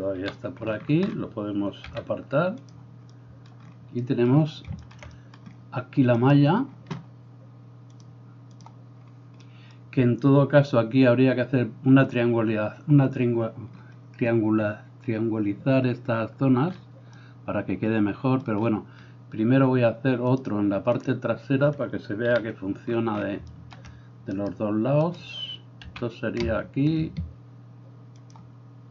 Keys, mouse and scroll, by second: 0.2 KP_7, 1.9 g, 3.1-8.1 middle drag, 8.1-28.4 drag, 22.4 KP_7, 23.5 shift+middle click, 23.5 shift+right click, 24.4 right click, 25.1 middle click, 25.1 right click, 26.0 r, 28.4-28.9 ctrl+middle drag.